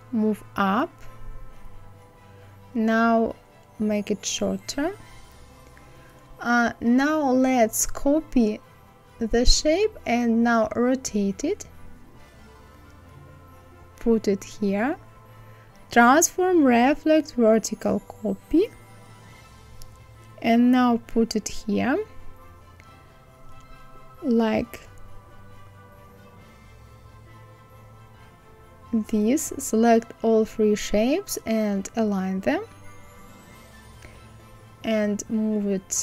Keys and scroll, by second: 6.2 ctrl+z.